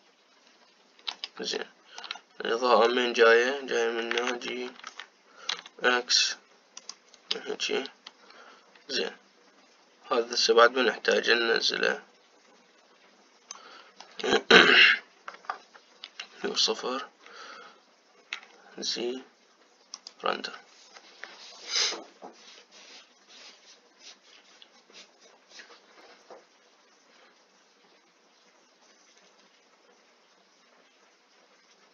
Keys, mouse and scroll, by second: 0.0-4.8 middle drag, 4.8 g, 11.9-14.8 drag, 14.8-16.1 middle drag, 16.1 KP_0, 19.1 z.